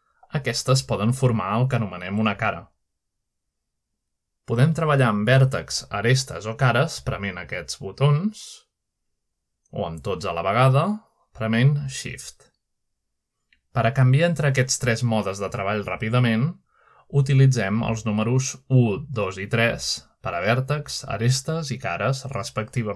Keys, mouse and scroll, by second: 0.0-0.3 typing, 0.2 shift+middle click, 1.1-3.4 drag, 2.1-2.8 typing, 4.0-4.8 typing, 4.0 shift+middle click, 5.4 click, 6.6 typing, 7.3 right click, 7.7 typing, 8.8-9.6 middle drag, 12.4 shift+click, 13.2 shift+click, 14.8 middle click, 15.6 click, 16.5 middle click, 17.1 typing, 18.1 click, 18.4 typing, 19.1 click, 20.0-21.0 typing, 22.3 click.